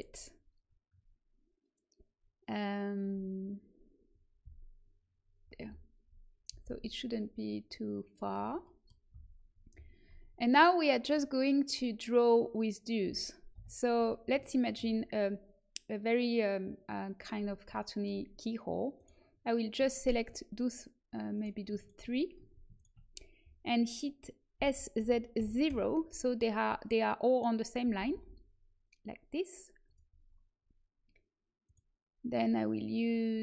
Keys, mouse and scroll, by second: 4.3 z, 6.4 g, 9.0 z, 11.0-13.5 drag, 13.5 KP_1, 17.3-18.9 middle drag, 18.9-24.5 right drag, 24.5 s, 27.8 g, 31.6-33.4 right drag.